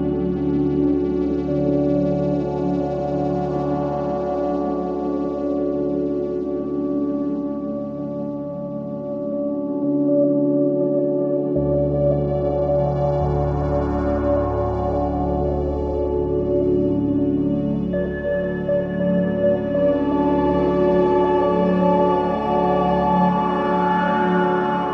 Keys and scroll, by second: 2.8 shift+x, 4.1 ctrl+space, 8.0 ctrl+alt+shift+space, 13.6 ctrl+shift+], 14.9 ctrl+[.